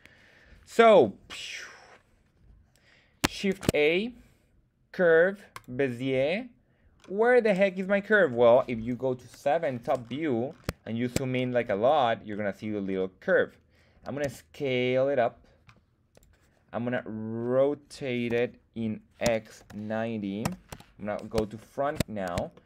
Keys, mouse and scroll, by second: 3.6 shift+a, 6.9-7.7 scroll up 1, 7.8-8.7 scroll down 1, 8.7-9.2 scroll down 2, 9.2 KP_7, 10.0-11.6 scroll up 5, 10.8 shift+middle click, 11.9 scroll up 1, 12.3-13.5 scroll down 4, 13.5 scroll down 1, 14.2 s, 16.1 click, 16.9-17.4 middle drag, 18.3-20.7 typing, 20.4 Return, 21.6-21.9 shift+middle drag, 22.5 shift+middle drag.